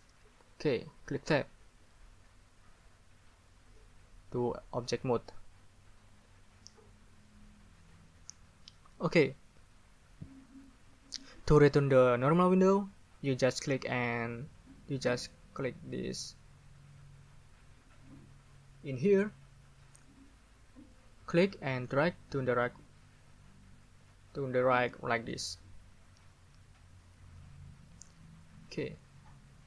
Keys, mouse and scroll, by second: 1.3 Tab, 21.9 click, 22.3-25.3 scroll up 2, 25.3 scroll up 1.